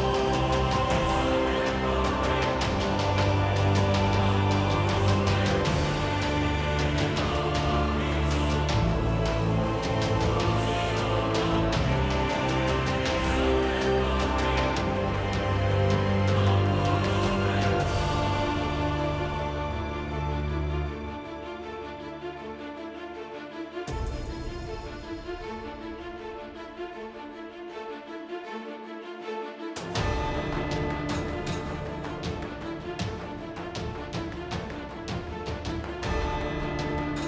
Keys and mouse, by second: 0.6 k, 2.3 click, 2.4 ctrl+Tab, 2.8 g, 3.6-4.1 drag, 4.1 k, 5.6 click, 5.8-7.3 typing, 8.2 right drag, 8.4 drag, 8.4 g, 8.9 g, 9.2-9.6 drag, 9.4 g, 11.6 g, 12.8 ctrl+x, 13.6 ctrl+x, 15.8-19.2 typing, 20.3 r, 22.0 KP_1, 22.6 e, 22.9 ctrl+z, 23.4 ctrl+z, 23.9 KP_1, 24.3 r, 25.7 z, 27.0 z, 27.0 KP_7, 27.4 z, 29.0 KP_3, 29.7 r, 30.5 z, 31.1 Tab, 31.5 Tab, 31.7 KP_Decimal, 31.8 Tab, 32.2 click, 32.6 ctrl+l, 34.2 a, 34.6 Tab, 34.8 Tab, 34.9 click, 34.9 Tab, 35.6 ctrl+Tab, 36.2-37.2 typing.